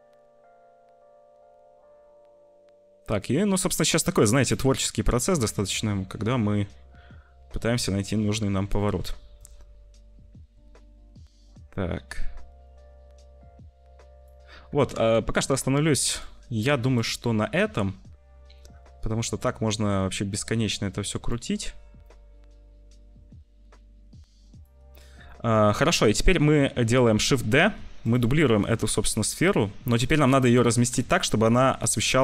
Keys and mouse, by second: 4.8 ctrl+z, 8.9 ctrl+z, 14.7 ctrl+s, 22.0-24.3 shift+middle drag, 25.2 shift+middle click, 27.2 shift+d, 29.0 s, 30.7 g.